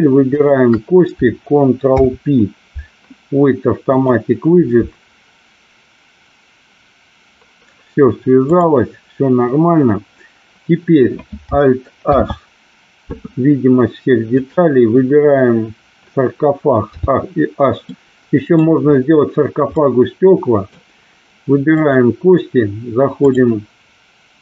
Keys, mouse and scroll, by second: 0.4 shift+click, 2.0 ctrl+p, 8.5 click, 12.1 alt+h, 16.9 h, 18.0 middle click, 19.7 middle click, 21.7 click, 23.2-24.4 drag.